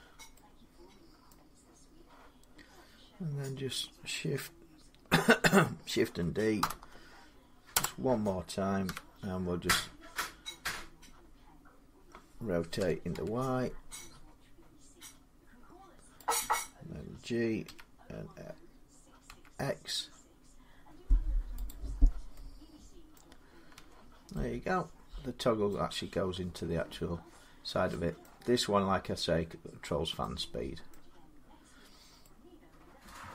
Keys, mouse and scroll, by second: 0.2 click, 1.1 middle click, 6.1-11.5 middle drag, 6.4 shift+d, 7.5 Return, 8.7 1, 12.6-12.9 typing, 16.1-21.2 drag, 17.5 g, 19.1 x, 21.5-22.8 drag, 23.0 middle click, 23.6 Tab, 25.5 middle click, 26.8 scroll down 3, 28.0 middle click, 30.4 scroll, 30.7 middle click, 31.5 scroll, 32.1 scroll down 2.